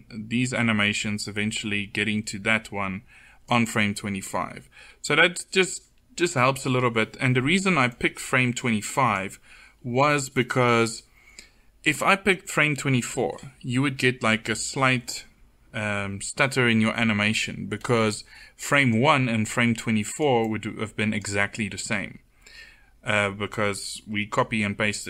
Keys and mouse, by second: 3.9 middle click, 7.6-21.9 drag, 23.2-25.0 drag.